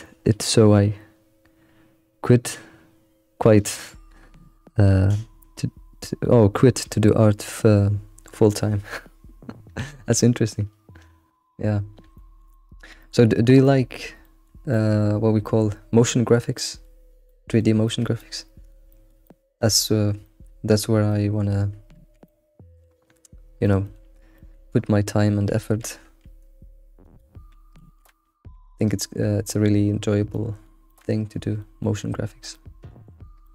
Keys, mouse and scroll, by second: 12.1-13.4 shift+middle drag, 13.4 scroll up 1, 13.6-19.9 middle drag, 19.9-20.2 scroll up 2, 20.2-21.9 shift+middle drag, 21.9 alt+x, 22.2-23.6 middle drag, 24.4-24.7 shift+middle drag, 24.7-25.1 scroll up 4, 25.5 alt+x, 26.0 alt+x, 27.0 click, 27.8 alt+x, 27.8 click, 28.5 g, 28.6 g, 29.2-30.1 scroll down 7, 30.3-33.1 shift+middle drag, 33.4 middle click.